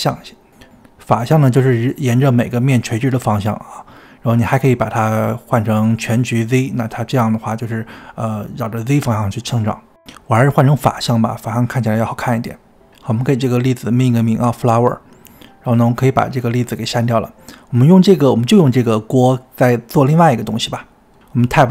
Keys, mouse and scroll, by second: 2.2-7.7 middle drag, 7.7 click, 8.4-10.4 middle drag, 11.4 click, 11.5 middle click, 12.2 click, 12.3 scroll down 1, 12.6 g, 13.0 click, 13.1 middle click, 13.3 click, 17.0-18.1 drag, 18.9 alt+g, 19.7-21.3 shift+middle drag, 21.3 scroll up 1, 21.4 Tab.